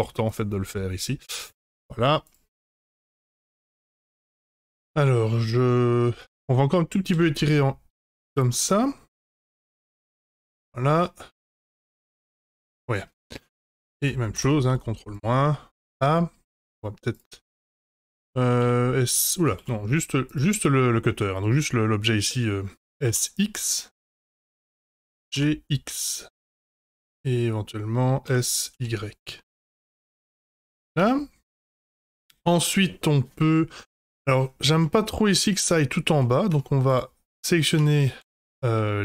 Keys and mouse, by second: 2.5-3.0 middle drag, 3.6 F5, 4.7-6.4 middle drag, 7.1 s, 8.6-9.5 middle drag, 9.7 g, 11.5-12.9 middle drag, 13.4 shift+click, 14.6 ctrl+KP_Subtract, 14.7 click, 15.4-16.5 middle drag, 17.4-18.0 middle drag, 18.4 s, 19.8 ctrl+z, 21.1 middle drag, 22.2 middle drag, 22.8 s, 24.5-24.9 middle drag, 25.0 g, 26.8-27.5 middle drag, 28.2 s, 30.0 click, 30.3-30.8 middle drag, 31.2 Tab, 31.8 Tab, 32.0-34.1 middle drag, 34.8 middle drag, 35.7 Tab, 36.1 3, 36.7 Tab, 36.8 click, 37.4 middle drag, 37.8 Tab, 38.1 3, 38.7 middle click.